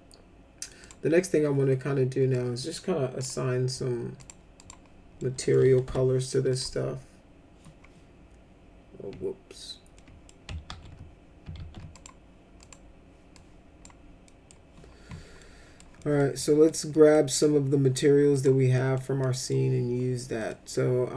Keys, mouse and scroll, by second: 0.8 click, 2.3 click, 4.2 click, 4.5 click, 5.2-5.5 middle drag, 5.9 m, 6.5 click, 9.9 ctrl+middle click, 10.6 ctrl+z, 11.5 ctrl+z, 11.9 click, 12.6 click, 13.3 click, 14.3 middle click, 15.4 middle click, 16.0 middle click, 16.4 middle click, 16.9 middle click, 18.3 click, 18.8 middle click, 19.2 middle click, 20.4 middle click.